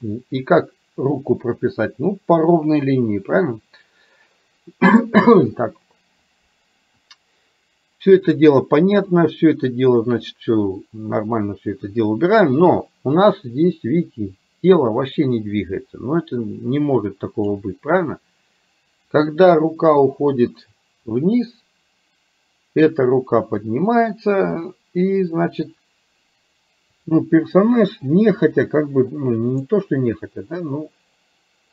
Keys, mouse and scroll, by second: 9.3-17.6 drag, 27.6 click, 29.3-31.7 drag.